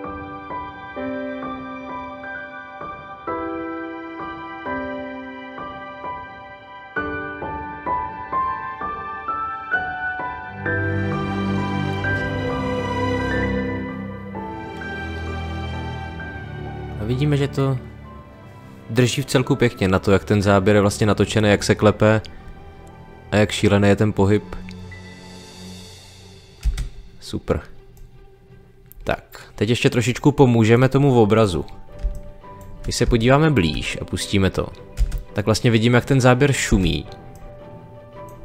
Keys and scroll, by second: 0.0-9.1 typing, 3.7 ctrl+z, 26.6 space, 32.0 space, 34.9 space, 36.6 space.